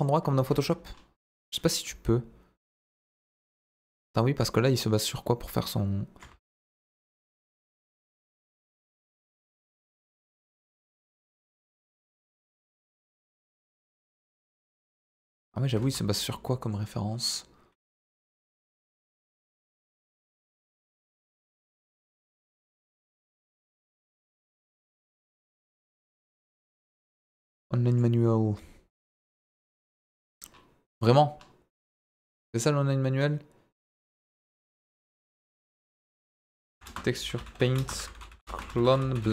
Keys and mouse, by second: 0.3 ctrl+z, 0.6 middle click, 1.8 f, 2.6 f, 2.6 f, 3.1 click, 3.7 ctrl+z, 4.1 middle click, 4.9-6.4 drag, 6.3 ctrl+z, 6.7-7.7 drag, 7.8 ctrl+z, 8.1 click, 9.2 ctrl+z, 9.7 click, 10.5 ctrl+z, 11.0 click, 11.6 click, 12.2 ctrl+z, 12.5 click, 13.0 click, 13.6-14.7 drag, 14.8 ctrl+z, 15.1 ctrl+z, 15.8 ctrl+z, 16.3 middle click, 22.6-25.5 right drag.